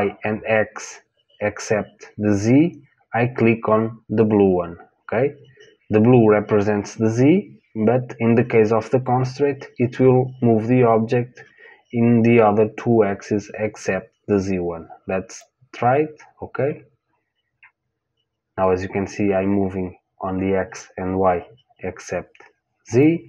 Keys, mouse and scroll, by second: 15.3 click.